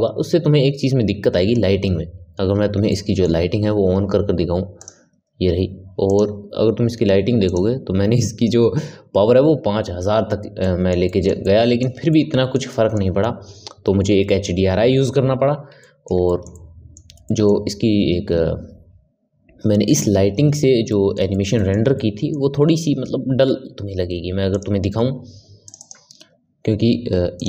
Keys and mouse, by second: 2.8-4.8 middle drag, 4.8 click, 6.0 click, 7.4 click, 10.6-15.7 middle drag, 15.8-20.2 shift+middle drag, 20.8-25.0 middle drag.